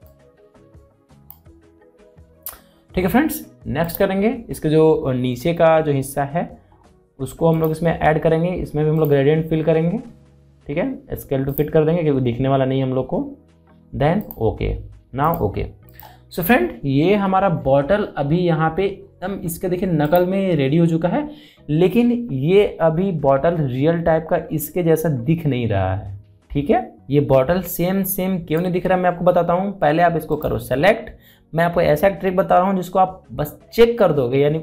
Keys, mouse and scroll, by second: 8.3 click, 12.1 click, 14.8 click, 17.7 alt+scroll up 1, 18.5 scroll down 1, 19.7-20.2 scroll up 1, 20.7 click, 21.5-23.4 scroll down 1, 31.0 click.